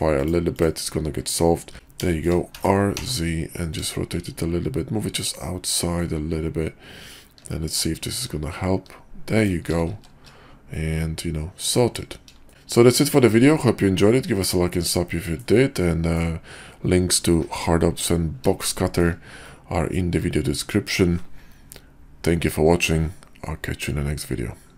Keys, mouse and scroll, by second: 1.7 r, 2.0 shift+middle click, 2.5 r, 10.0 shift+2, 10.7-12.0 middle drag, 12.5-14.5 shift+middle drag, 15.1 shift+middle click, 15.8 click, 18.6-19.0 shift+middle drag, 19.5 click.